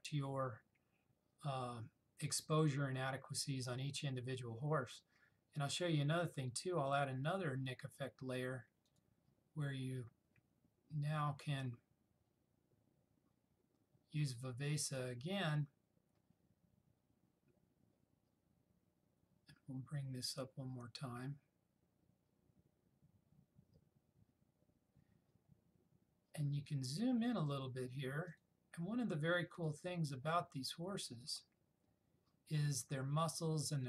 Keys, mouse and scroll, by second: 9.0 click, 15.0 click, 27.6 click.